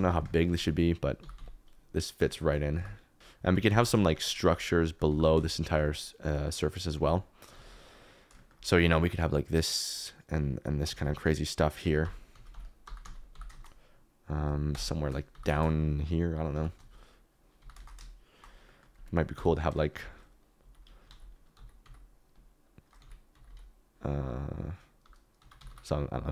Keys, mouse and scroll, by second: 0.3 middle click, 0.6 z, 1.1 g, 1.3 z, 2.7 g, 3.2 z, 3.6 g, 3.8 z, 5.0 g, 5.2 z, 5.9 middle click, 7.3 alt+d, 7.5 z, 11.1 alt+d, 11.8-13.3 typing, 14.7 KP_0, 15.3 g, 15.5 shift+z, 16.5 g, 16.7 z, 17.5 g, 17.7 shift+z, 18.3 shift+right click, 18.6 middle click, 19.3 KP_7, 19.9 KP_Decimal, 21.2 alt+d, 21.5 x, 21.8 x, 23.1 alt+d, 23.3 x, 23.9 x, 25.3 g, 25.5 y, 26.0 y.